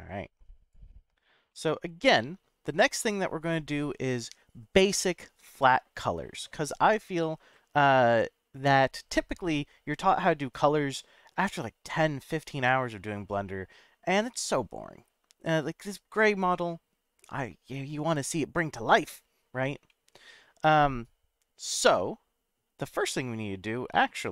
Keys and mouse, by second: 1.5-2.4 middle drag, 16.5-19.1 middle drag, 19.9-20.8 middle drag.